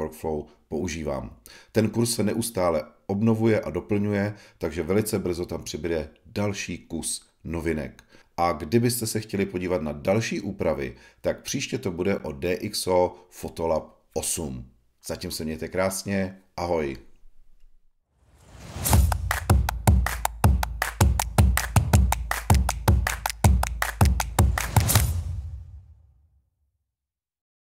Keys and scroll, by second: 0.0 b, 0.4 f, 1.3 i, 2.0 alt+m, 3.2 i, 4.9 alt+m, 5.6-7.8 typing.